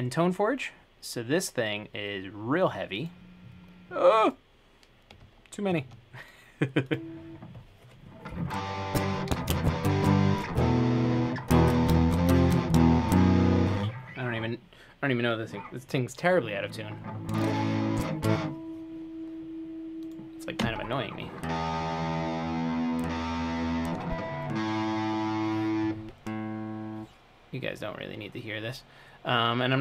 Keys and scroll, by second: 20.8 0.